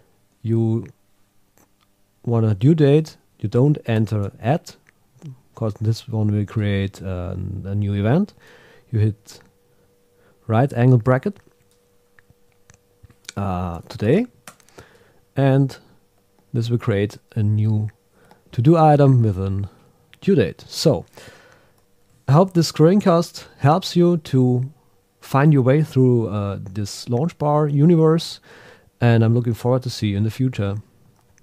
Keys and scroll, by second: 3.9 shift+@, 9.2 shift+>, 14.5 Return, 22.4 ctrl+Up.